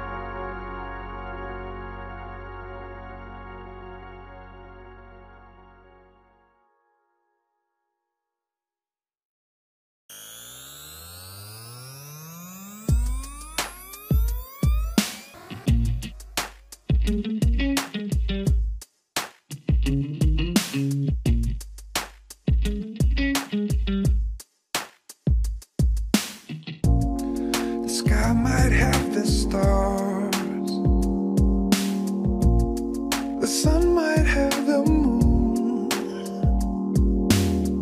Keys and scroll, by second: 1.8 alt+Return, 4.9 Return, 6.0 alt+shift+Page_Up, 8.2 alt+Return, 9.0 alt+shift+Page_Up, 11.0 alt+shift+Page_Up, 12.1 alt+Return, 12.8 Return, 13.9 alt+shift+Page_Up, 14.3 alt+Return, 16.0 Return.